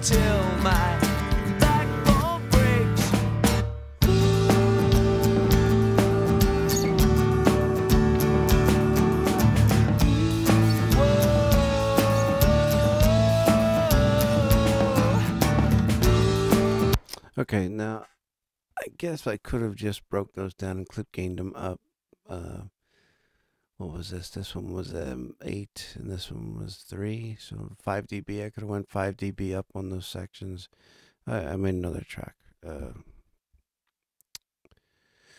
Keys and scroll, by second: 16.7 space.